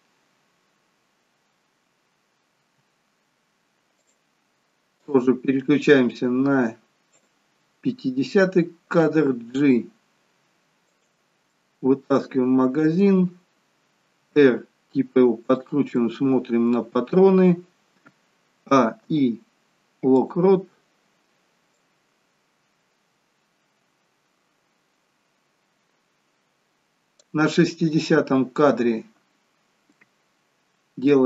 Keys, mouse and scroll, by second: 2.7 r, 5.1 click, 11.6 middle click, 14.3 r, 16.2 middle click, 18.9 a, 19.2 i, 22.0 click.